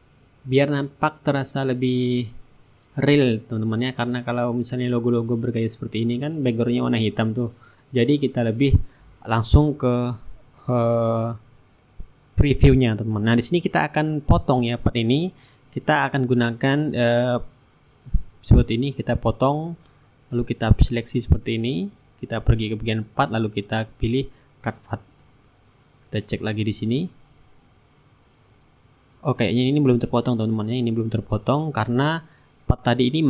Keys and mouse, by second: 0.7-2.4 drag, 1.8 right click, 2.9-6.3 drag, 4.4 middle click, 5.2-6.3 right drag, 6.4-8.2 middle drag, 11.1 click, 13.6 click, 15.7-19.8 drag, 19.8-22.7 drag, 21.4-22.7 right drag, 23.0-28.1 drag, 24.7-28.1 right drag, 28.2 ctrl+shift+g, 28.8-32.7 drag, 30.5 shift+right click, 32.1 ctrl+z.